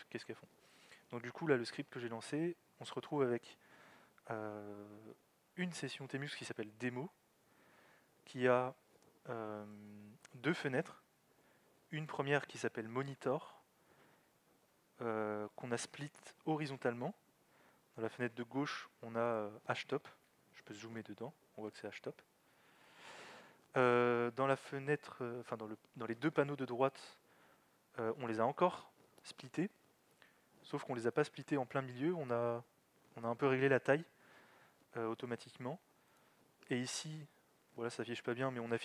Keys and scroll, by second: 20.7 alt+x, 21.0 z, 22.5 alt+x, 22.8 z.